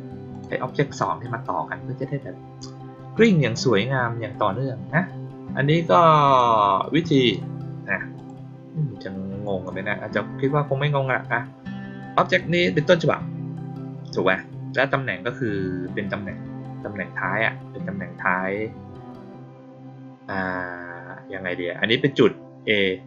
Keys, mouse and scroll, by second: 0.2 click, 0.8 click, 6.2 click, 7.0 right click, 8.1 click, 12.3 click.